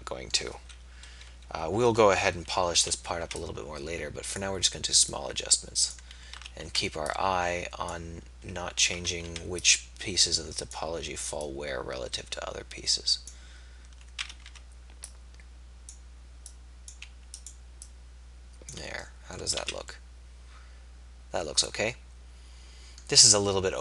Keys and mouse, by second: 1.3 KP_1, 2.9 a, 3.3 b, 6.7 a, 9.0 a, 9.2 b, 11.5-12.5 drag, 14.2 a, 14.6 b, 16.5 click, 19.8 z.